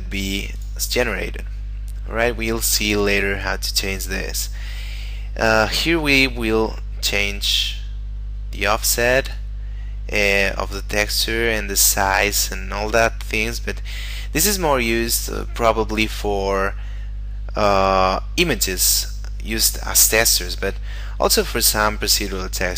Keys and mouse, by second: 0.6 click, 3.2 middle click, 7.7 click, 12.7 middle click, 17.7 middle click, 21.9 middle click.